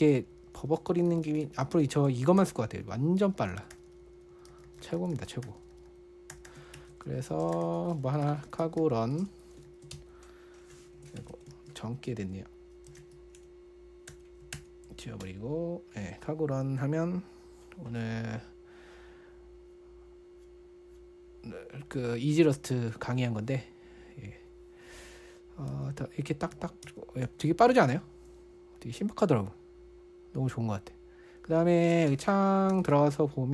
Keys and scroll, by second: 0.2 ctrl+u, 0.4 ctrl+u, 0.5 ctrl+u, 1.3 ctrl+d, 1.5 ctrl+d, 1.7 ctrl+d, 2.8 ctrl+u, 2.9 ctrl+u, 3.1 ctrl+u, 3.7 ctrl+d, 3.8 ctrl+d, 3.9 ctrl+d, 4.1 ctrl+u, 4.3 ctrl+u, 4.4 ctrl+u, 4.9-6.1 typing, 7.2 super+2, 7.5-9.7 typing, 10.1 ctrl+f, 10.3 Return, 11.6 BackSpace, 11.7 BackSpace, 11.9 ctrl+f, 13.0-14.5 typing, 15.6 Return, 26.1 super+1, 26.7 super+2, 26.9 super+1, 27.3 super+2, 27.7 super+1, 28.1 super+2, 28.3 super+1, 32.3 super+space, 32.9-33.5 typing.